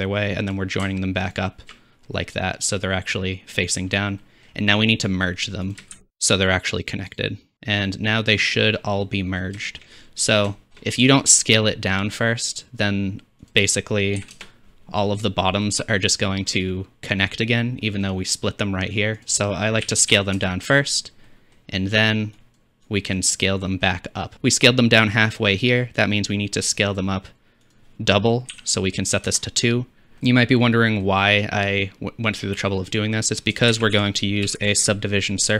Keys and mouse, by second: 0.0-1.7 drag, 2.2-3.8 middle drag, 4.2-5.0 middle drag, 5.0-7.9 drag, 6.0 shift+a, 8.4-9.1 drag, 13.6 click, 13.6 middle click, 13.6 right click, 15.9 click, 15.9 middle click, 15.9 right click, 22.6-24.3 drag, 24.3 shift+d, 26.0-29.3 drag, 33.7 shift+a.